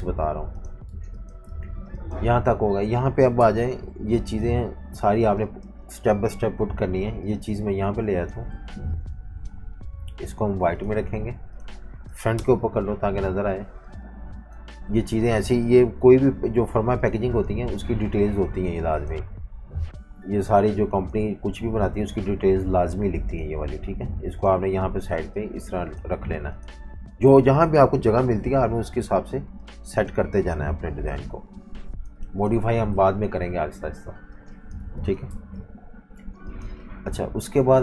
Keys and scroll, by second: 0.9-1.8 typing, 3.4 super+-, 3.5 super+-, 4.2-5.8 typing, 8.6-10.1 typing, 12.3 shift+super+], 16.1 i, 19.6 v, 33.3 super+-, 33.5 super+-, 34.3-36.3 typing, 37.5 typing.